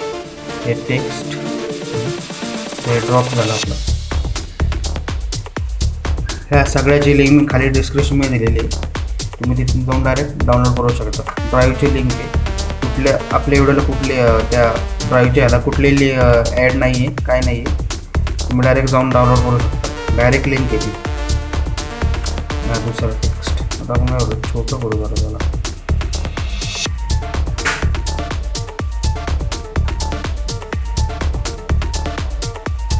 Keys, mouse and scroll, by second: 5.9 Down, 8.3 Down, 13.6 click, 21.4-25.6 drag, 25.6 Down, 26.1 Left, 28.7 Left, 29.3 Down, 30.0 Left, 31.9 Right.